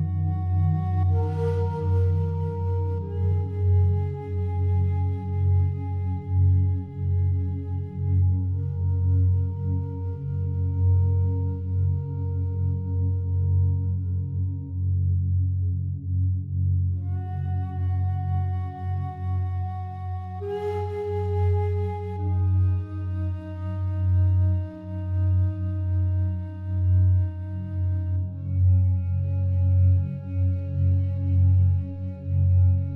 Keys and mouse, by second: 0.3 alt+click, 0.9 ctrl+alt+click, 1.3 alt+shift+click, 1.7-5.2 ctrl+alt+drag, 5.9 click, 7.8 click, 8.7 click, 13.0 click, 15.6-16.2 drag, 17.4 Tab, 19.4-20.7 drag, 21.3 ctrl+z, 22.3 click, 22.9 click, 24.2 click, 24.6 click, 25.6 click, 27.3 click, 27.7 click, 28.7 click, 29.7 click, 29.8 click, 30.0 click, 31.4 click, 31.7 click, 32.6 click.